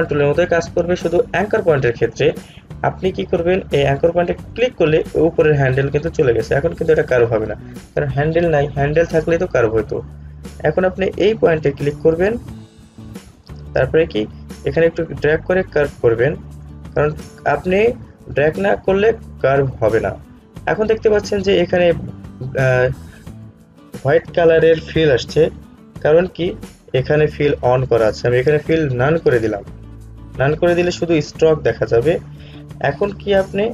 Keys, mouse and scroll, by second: 4.6 ctrl+z, 4.7 click, 12.8-29.4 drag, 29.4 click.